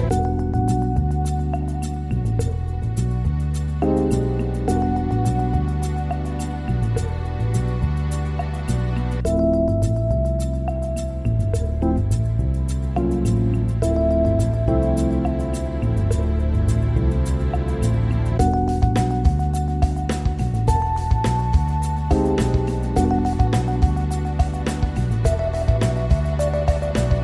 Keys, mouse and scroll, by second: 10.4 shift+space, 20.6 shift+space, 21.2-24.3 drag, 26.0-27.2 drag.